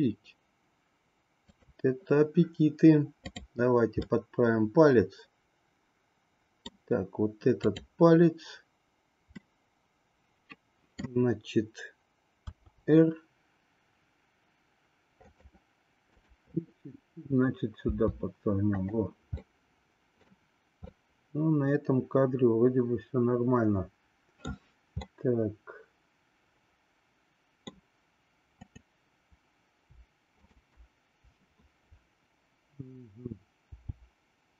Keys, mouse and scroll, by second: 1.5 click, 3.2 click, 4.2-6.9 middle drag, 9.4-11.0 middle drag, 12.4 r, 16.1-17.5 drag, 17.9 r, 19.4 middle click, 20.9-24.3 middle drag, 25.1-27.8 middle drag, 28.6-29.9 drag, 33.7 g.